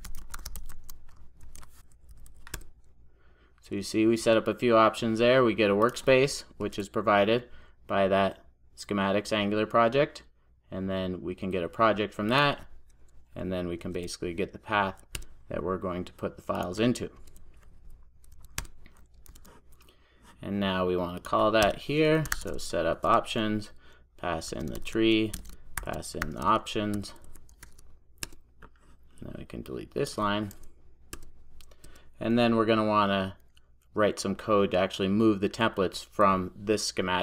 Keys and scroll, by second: 1.5 super+j, 2.5 Return, 6.7 alt+Return, 13.8 alt+Return, 19.3 super+s, 23.5 Return, 28.3 Return.